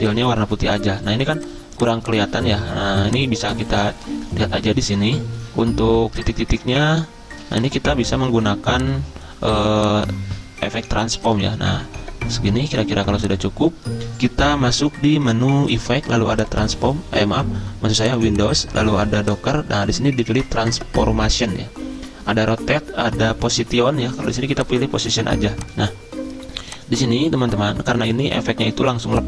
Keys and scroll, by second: 28.6 z.